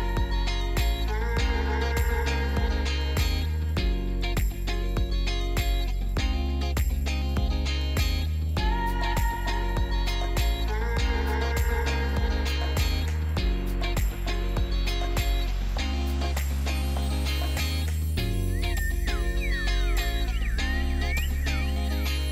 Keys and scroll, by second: 0.6 super+s, 1.8 super+z, 2.1 super+z, 2.5 super+z, 5.4 super+s, 10.2 super+z, 10.9 super+z, 11.2 super+z, 13.4 super+z, 13.8 super+z, 14.5 super+z, 15.5 super+z, 15.9 super+z, 16.1 super+z, 16.5 super+z, 17.4 super+z, 17.7 super+z, 18.9 super+z, 19.2 super+z, 21.4 super+z, 21.6 super+z.